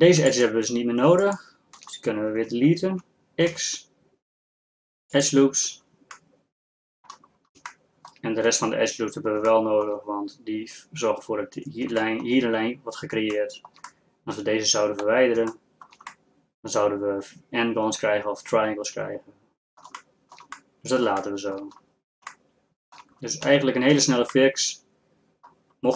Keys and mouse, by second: 3.5 x, 6.6 middle click, 6.9 middle click, 7.0 click, 7.1 middle click, 7.4 click, 8.0-9.8 middle drag, 13.5 middle click, 13.7-15.8 middle drag, 17.1 middle click, 19.1 middle click, 20.4 middle click, 21.4 middle click, 22.7 middle click, 23.5 z, 24.0 z.